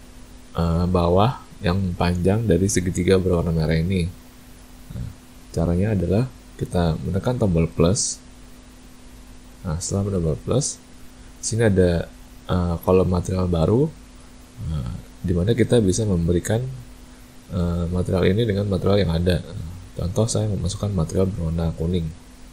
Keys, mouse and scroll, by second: 8.5 click, 16.3 click.